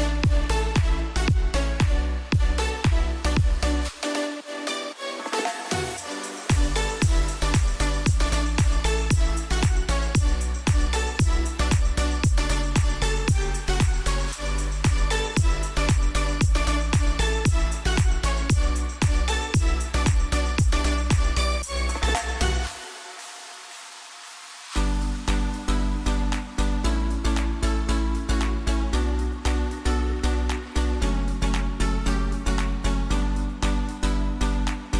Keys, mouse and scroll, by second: 5.9 click, 11.2 click, 16.2 click, 20.7 click, 28.6-34.9 drag.